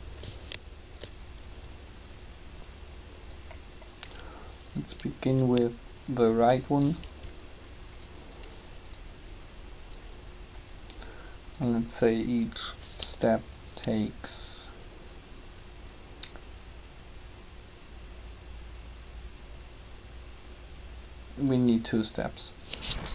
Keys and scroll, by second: 7.1 shift+g, 13.0 g.